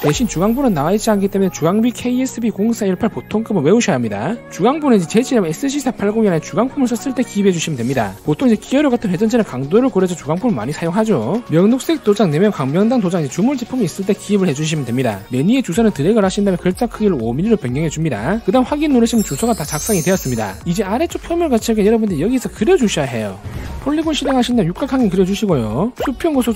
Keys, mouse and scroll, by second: 16.4 click, 17.4 click, 18.2 click, 25.0 click, 25.7 click.